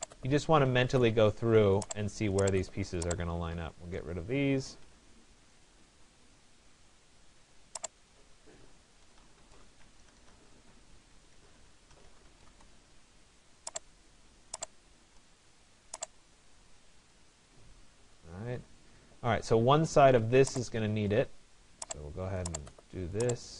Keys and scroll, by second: 4.6 Delete, 9.2 Return.